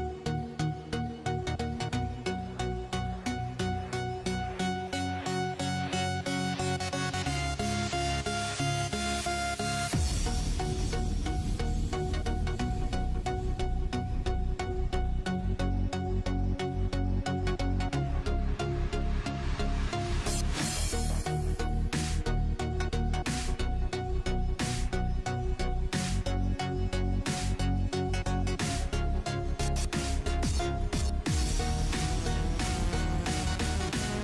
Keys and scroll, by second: 0.0-2.4 typing, 5.5-6.4 typing, 9.2-11.8 typing, 13.4-14.5 typing, 17.2-20.9 typing, 21.1 Down, 22.8-23.8 typing.